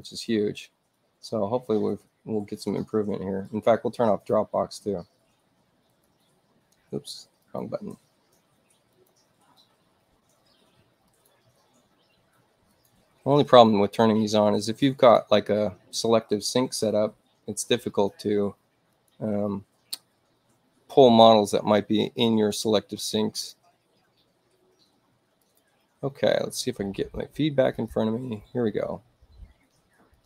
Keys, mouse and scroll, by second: 0.0 click, 3.6 right click, 6.0 click, 7.5 click, 9.0 click, 11.2 click, 12.8 click, 14.9 click, 18.8 click, 23.3 click, 25.3 click, 27.7 click, 30.0 click.